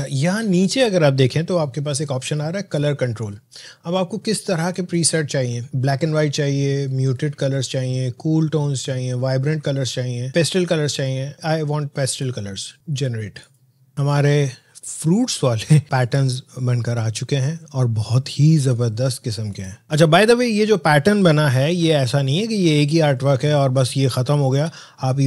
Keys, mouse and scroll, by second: 19.8 click, 22.0 alt+scroll down 1, 22.4 alt+scroll up 1, 23.7 alt+scroll down 1, 24.2 space.